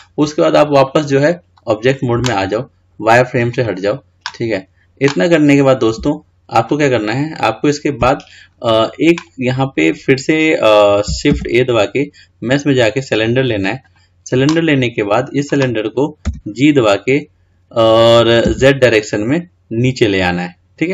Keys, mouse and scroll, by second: 1.0-4.8 drag, 7.2-7.8 scroll down 5, 7.8-8.1 scroll up 2, 8.6 scroll up 1, 8.7 scroll down 2, 9.9 click, 11.5 shift+a.